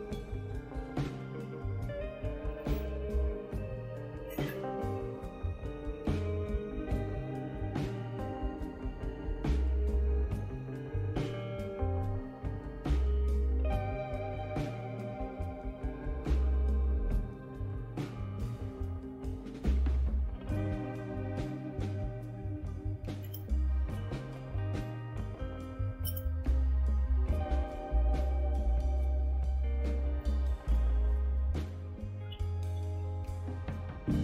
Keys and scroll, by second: 3.5 Return, 23.2 Return, 26.0 Return, 32.1-33.4 typing, 33.9 Return.